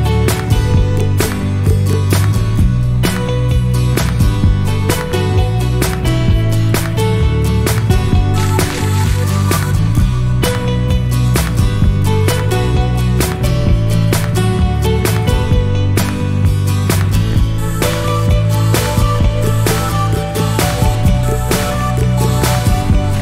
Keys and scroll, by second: 0.7 Escape, 14.8 Escape.